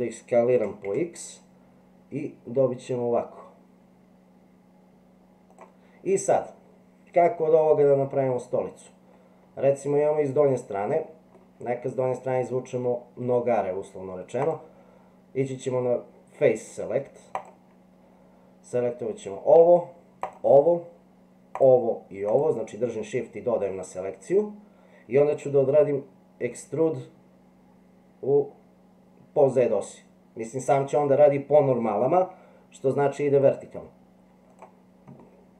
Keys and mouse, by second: 0.6 s, 7.8-11.5 middle drag, 14.4 click, 21.5 shift+click, 26.4 e, 35.2 middle click.